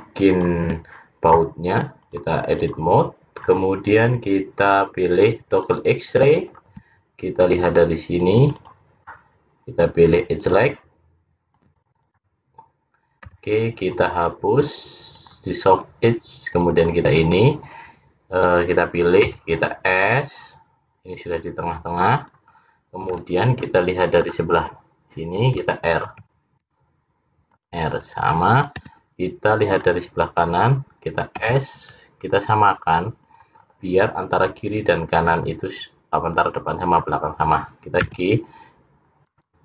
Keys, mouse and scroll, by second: 0.1 click, 2.0 click, 5.4 click, 6.5-8.1 scroll up 4, 8.1 click, 8.5 click, 10.5 click, 11.5 click, 12.2 click, 13.2 x, 16.6 click, 16.8 click, 19.4 s, 23.3 middle click, 26.1 ctrl+r, 31.5 s, 35.0 click, 36.4 click, 38.1 g.